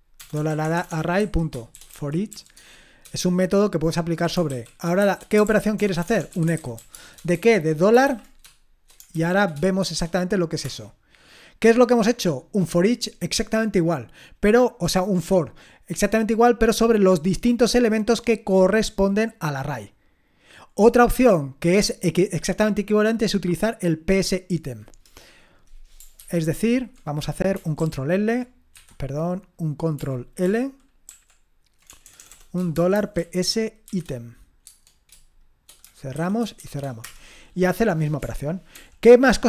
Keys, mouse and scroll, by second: 0.0-2.8 typing, 4.2-8.0 typing, 9.1-11.2 typing, 16.9-26.2 drag, 24.7-26.0 scroll down 1, 26.0 scroll down 1, 26.2 ctrl+', 27.8 ctrl+l, 28.7 Escape, 29.6-31.1 drag, 30.4 ctrl+l, 31.1 ctrl+p, 31.9-33.9 typing, 34.6 Tab, 35.9-36.6 typing, 37.0 Return.